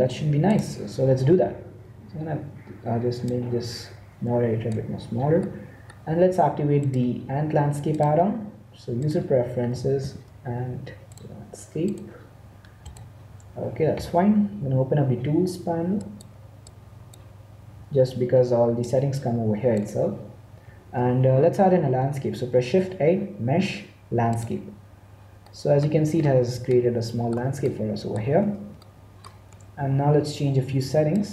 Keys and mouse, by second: 3.2-4.9 drag, 5.4 middle click, 6.7-8.6 drag, 16.2-18.4 drag, 18.7-20.6 drag, 25.8 middle click, 27.7 middle click, 31.0 click.